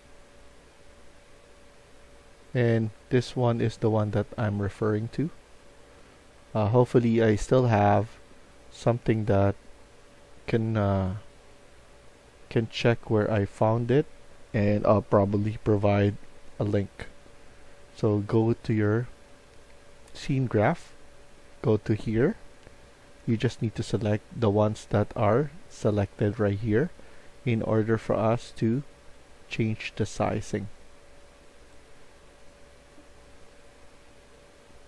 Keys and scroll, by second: 2.9 c, 4.7 d, 5.9 w, 6.7 w, 15.3 Tab, 16.1 Tab.